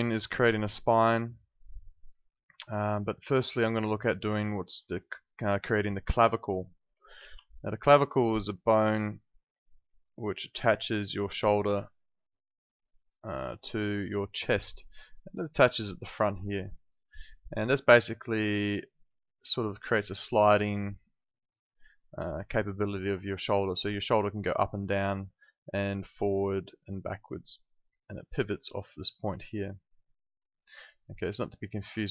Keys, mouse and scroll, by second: 2.2 alt+click, 3.2 alt+middle click, 3.5 alt+right click, 3.8 alt+click, 4.3 alt+click, 7.2 ctrl+2.